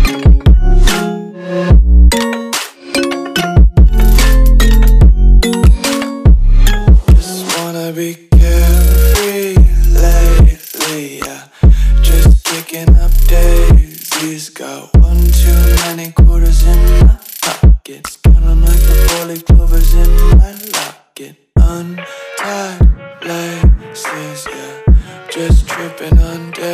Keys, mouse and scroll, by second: 0.9 ctrl+c, 2.2 click, 3.1 ctrl+v, 3.9 click, 5.3 right click, 5.9 click, 8.3 F2, 8.7 right click, 9.9 click, 13.3 right click, 14.3 click, 19.3 v, 20.0 BackSpace, 23.9 KP_6, 25.1 click.